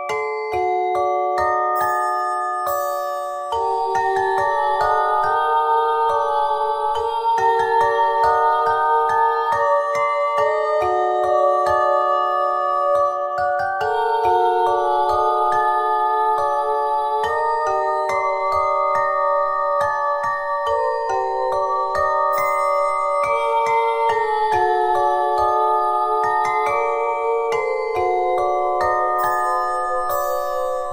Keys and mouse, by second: 3.4-5.4 drag, 3.5 z, 3.9 c, 7.6 Tab, 8.0 z, 8.7 Tab, 10.6 Tab, 14.7 KP_3, 15.1 Tab, 16.0 right click, 16.1 z, 16.4 c, 17.3 middle click, 18.4 Tab, 18.9 Tab, 19.1 Tab, 20.2 Tab, 20.7 right click, 21.3 c, 22.4 click, 24.0 click, 24.4 c, 27.6 Tab, 29.0 z, 29.4 Tab.